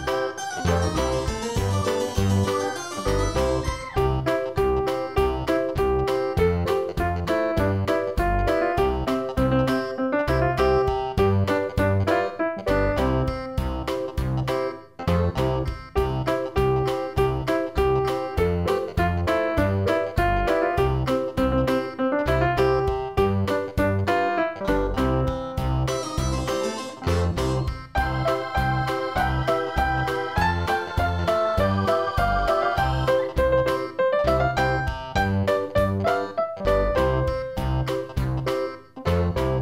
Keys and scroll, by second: 11.4 ctrl+i, 16.8 ctrl+z.